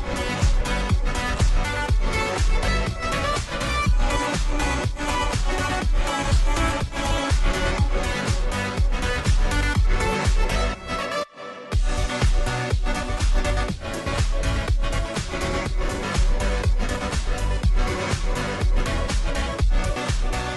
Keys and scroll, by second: 19.6 ctrl+r.